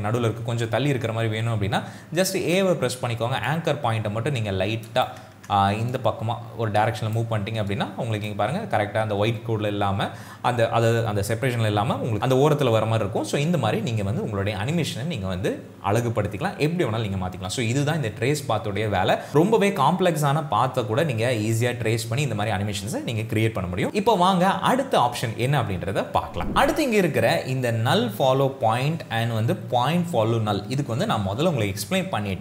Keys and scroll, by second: 2.5 a, 5.6 ctrl+z, 8.4 space.